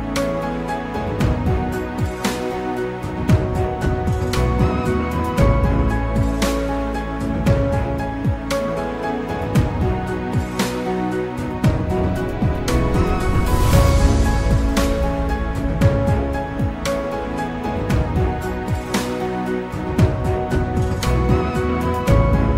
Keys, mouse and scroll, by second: 2.2-4.1 scroll down 1, 4.1-6.0 scroll up 2, 6.0 ctrl+r, 10.4-12.1 drag, 12.1 ctrl+r, 15.5 click, 18.0 Tab, 21.9 click.